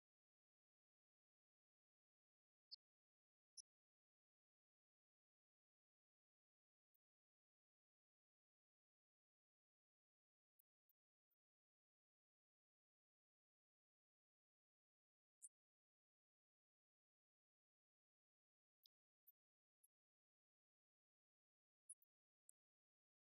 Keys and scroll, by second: 0.3-1.2 typing, 3.4 Return, 5.5 Up, 8.2 Down, 8.4 Left, 8.5 Up, 8.7 Left, 9.3 Right, 12.3 Left, 13.5 Right, 14.5 Left, 17.6 1, 17.9 9, 19.9 Return, 20.3 Up, 20.4 Left, 21.1 shift+Right, 22.4 shift+Down, 23.2 ctrl+d.